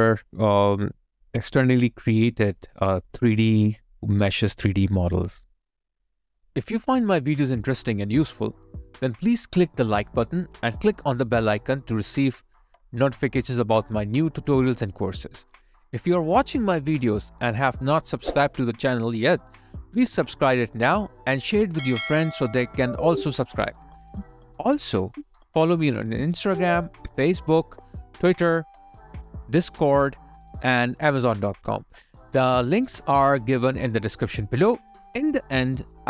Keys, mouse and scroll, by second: 7.4 alt+right click, 8.3 alt+click, 9.2 alt+right click, 9.6 alt+middle click, 10.0 alt+click, 10.6 alt+right click, 11.1 alt+click, 11.9 alt+right click, 12.3 alt+click, 17.3 alt+click, 17.5 alt+right click, 27.5 double click, 32.4 alt+click.